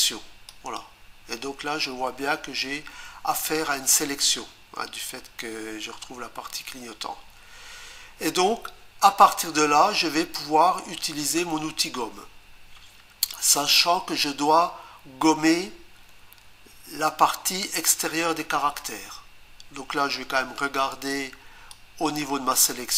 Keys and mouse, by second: 0.5 click, 21.7 click.